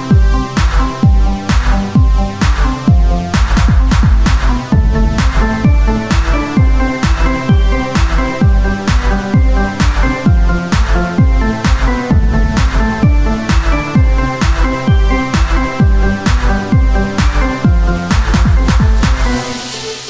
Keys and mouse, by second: 1.5 z, 2.6 Tab, 3.6 ctrl+Tab, 4.2 z, 4.6 c, 7.3 z, 7.9-9.3 drag, 9.3 c, 10.2 middle click, 10.4 z, 11.7 click, 14.6-17.0 middle drag.